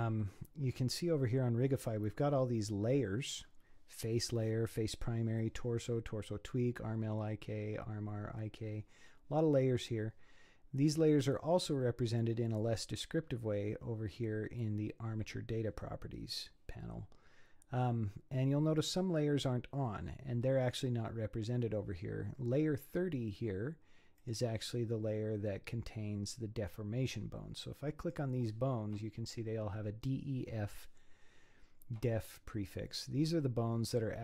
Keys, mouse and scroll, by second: 24.2 click, 28.0 click, 32.6-34.2 scroll down 2.